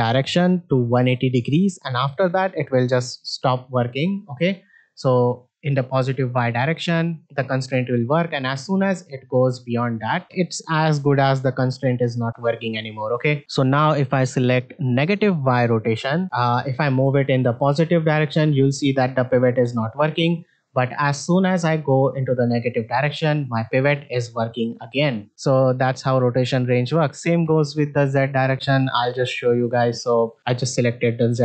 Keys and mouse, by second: 4.3 r, 13.6-15.5 drag, 17.0 r, 21.4 r, 25.6-29.6 drag.